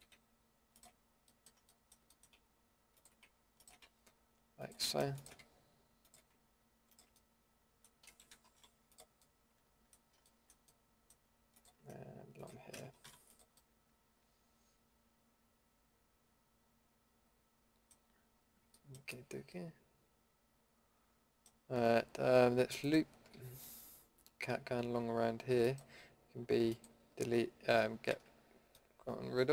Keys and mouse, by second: 7.1-8.5 middle drag, 8.5 Delete, 11.5-13.0 middle drag, 13.0 Delete, 14.0 middle drag, 14.4 middle click, 14.5 middle click, 14.6 middle click, 15.3-15.8 middle drag, 17.9-20.3 middle drag, 22.8-23.4 middle drag, 23.4 a, 28.1 ctrl+x.